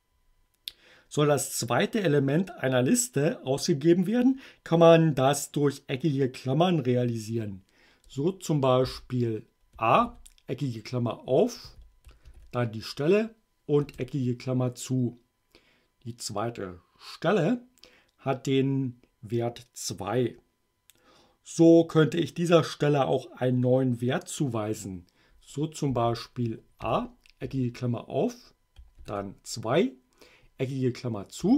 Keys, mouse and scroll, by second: 8.9 a, 10.0 alt+8, 11.6 2, 12.3 alt+9, 13.8 Return, 25.9 a, 26.8 alt+8, 27.4 alt+2, 28.9 alt+9, 31.4 space.